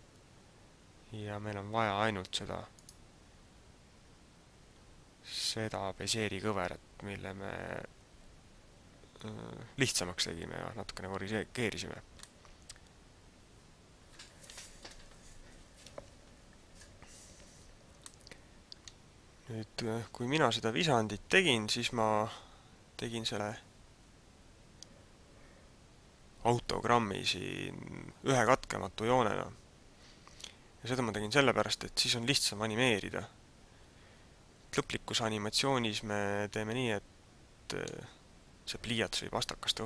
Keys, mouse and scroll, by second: 2.9 right click, 4.0-4.4 scroll up 2, 4.8-5.6 scroll down 3, 6.0-6.5 scroll up 2, 12.1 middle click, 15.8 z, 17.4 z, 18.1 middle click, 34.8 middle click.